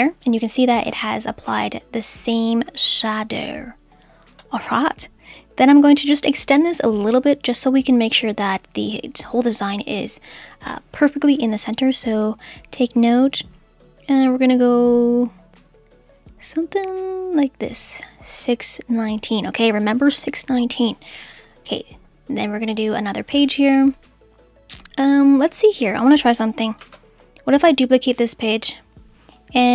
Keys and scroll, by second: 26.8 super+d.